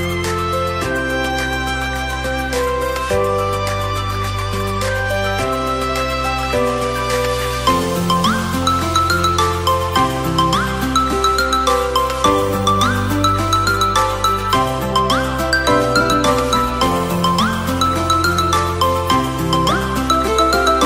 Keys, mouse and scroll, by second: 0.5 r, 10.5 click, 11.9 Tab, 12.5-14.0 shift+middle drag, 14.0-14.8 scroll up 1, 14.8 click, 15.5 click, 18.5-19.7 middle drag, 19.7 click, 20.3 middle click.